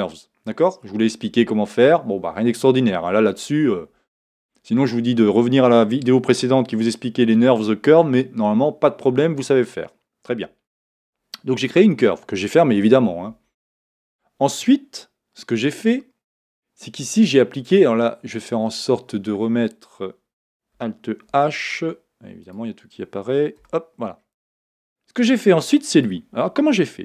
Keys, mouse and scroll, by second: 13.4 Tab, 21.5 alt+h, 22.4 click, 23.6-26.0 middle drag, 23.6 h, 24.1-24.4 scroll down 2, 26.0 click, 26.1 middle click.